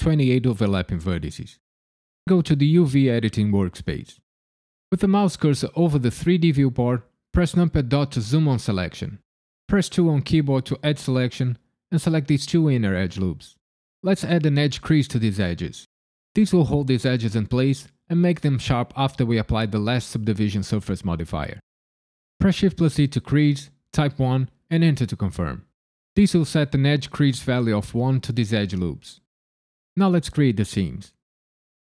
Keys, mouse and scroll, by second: 7.5 KP_Decimal, 9.9 2, 12.4 alt+click, 13.1 middle click, 14.9 alt+shift+click, 22.4 shift+e, 23.9 KP_1, 24.8 KP_Enter, 26.9 click, 30.4 middle click.